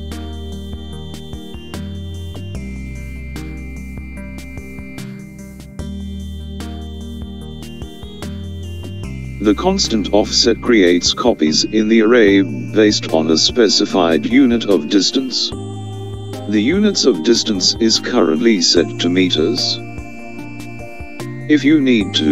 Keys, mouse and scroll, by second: 1.1 click, 6.6 click, 18.7 click.